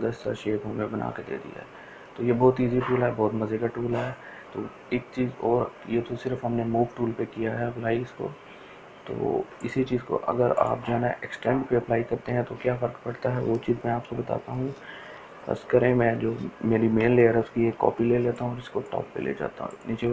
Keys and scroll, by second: 13.8 Delete, 17.7 ctrl+j.